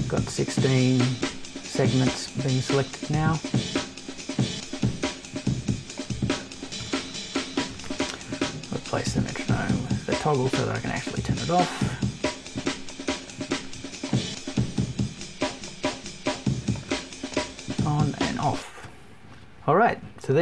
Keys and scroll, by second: 6.7 BackSpace, 7.7 shift+super+BackSpace.